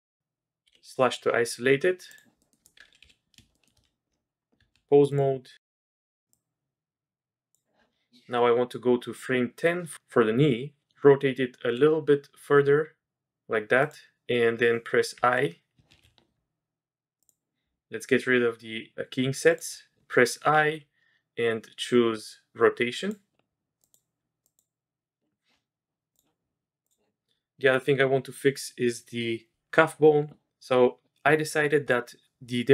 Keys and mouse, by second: 0.7 KP_Divide, 2.4 middle click, 3.0 KP_3, 3.5 shift+middle drag, 5.1 Tab, 6.3-7.5 drag, 11.6 r, 15.1 i, 16.1 ctrl+z, 20.5 i, 23.8 click, 24.4 click, 26.2-27.0 drag.